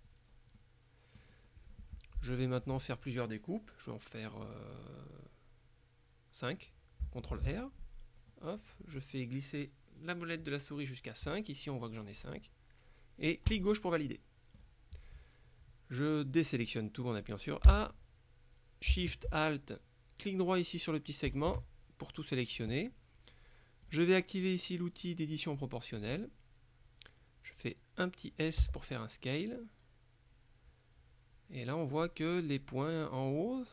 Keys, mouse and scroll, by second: 0.2 middle click, 0.7 right click, 7.4 ctrl+r, 13.6 click, 17.8 a, 21.4 alt+shift+right click, 23.9 click, 25.7 click, 28.7 s.